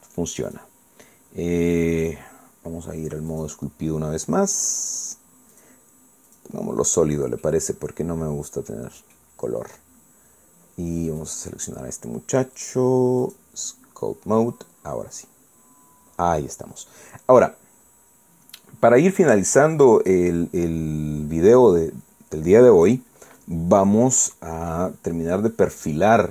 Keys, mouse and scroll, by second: 1.5 click, 4.3 click, 6.5 click, 7.3 click, 8.4-10.3 middle drag, 13.6 click, 14.2 click, 18.8-19.6 scroll up 4.